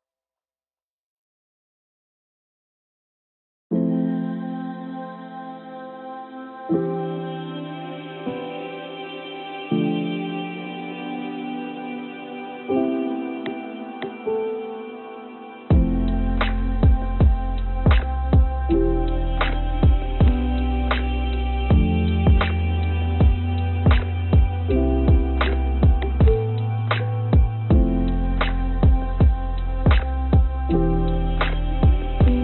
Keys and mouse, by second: 5.7 ctrl+z, 6.2 e, 7.7 click, 8.2 s, 9.9 e, 13.0 f, 13.6-15.5 drag, 16.2-19.8 drag, 21.6 click, 24.1 click, 25.1 e, 28.0 click, 28.8 a, 29.7 s.